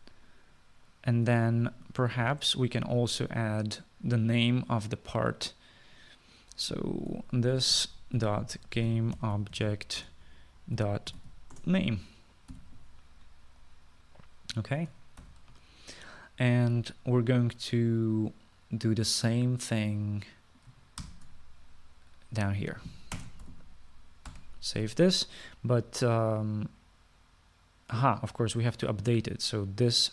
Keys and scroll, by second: 0.6 space, 8.0-13.6 typing, 16.3 ctrl+s, 22.1 ctrl+c, 24.2 Return, 24.5 ctrl+v, 25.4 ctrl+s.